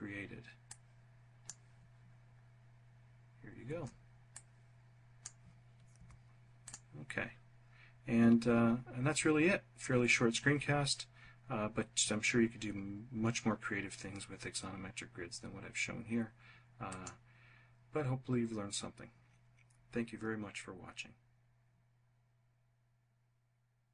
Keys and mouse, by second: 3.2-4.2 drag, 4.8 3, 5.5 click.